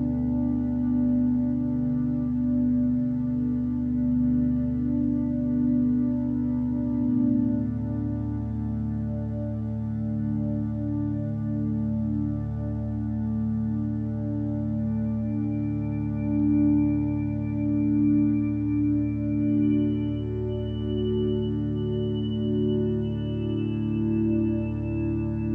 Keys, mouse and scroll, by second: 13.4 ctrl+space, 21.2 x, 23.8 b.